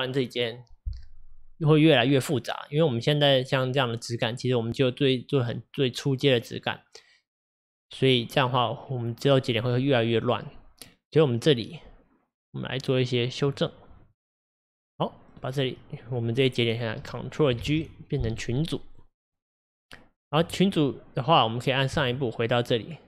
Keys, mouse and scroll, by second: 14.1 click, 17.6 ctrl+g, 19.9 click.